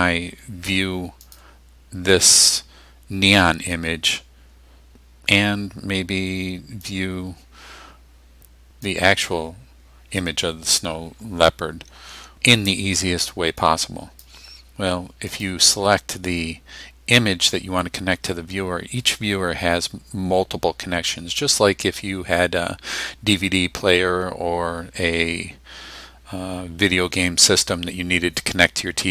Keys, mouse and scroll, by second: 1.3 click, 6.9-9.1 drag, 13.7-14.4 drag, 15.3 click.